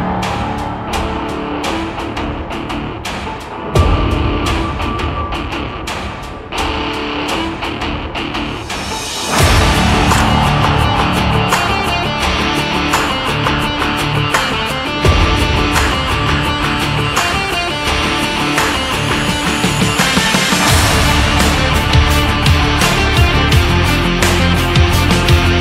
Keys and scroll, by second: 0.5 ctrl+=, 11.3 ctrl+-, 14.1 ctrl+-.